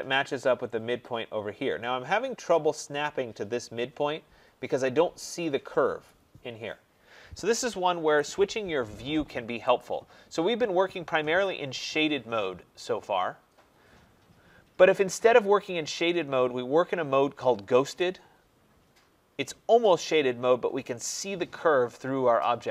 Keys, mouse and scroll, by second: 0.0-2.3 scroll, 8.0 Escape, 9.7 click, 13.9 click, 17.9 click.